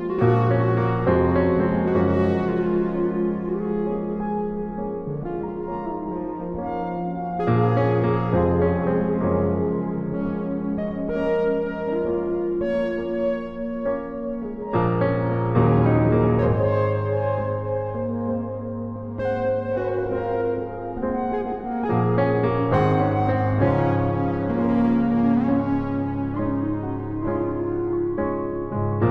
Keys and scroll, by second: 3.9 shift+Return, 6.2 b.